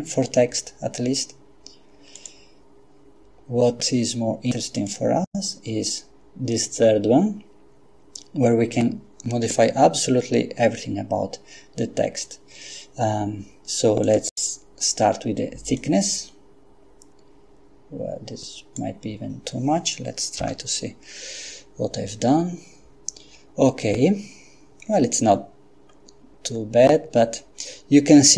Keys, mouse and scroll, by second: 2.2 click, 4.9 click, 14.1 click, 15.8-19.3 drag, 20.5 F12, 25.9-26.4 scroll up 2, 26.6-27.1 scroll up 2, 27.1-27.6 scroll up 2.